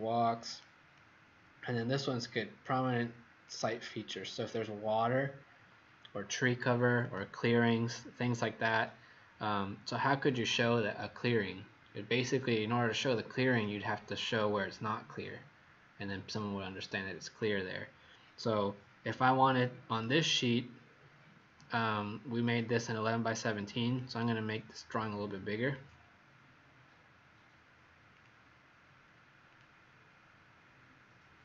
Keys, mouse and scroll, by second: 0.9 click, 3.4 click, 3.8 click, 6.9 click, 8.1-8.6 scroll down 1, 8.6 scroll down 1, 13.4 click, 22.1 scroll down 1, 23.3 click, 23.9 click, 25.6 click.